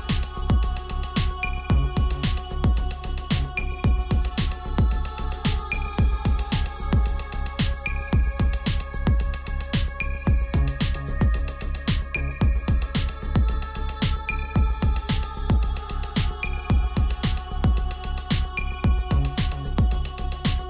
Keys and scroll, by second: 12.0 ctrl+z.